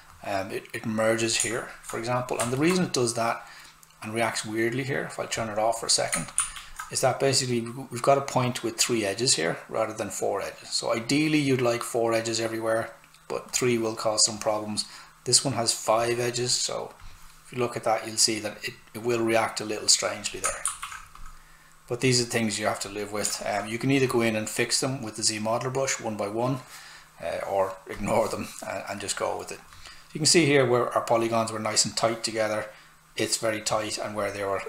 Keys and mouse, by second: 2.6 alt+right click, 5.4 click, 6.4 shift+f, 17.0 click, 20.4 shift+click, 20.7 shift+f, 21.2 click, 28.0 click.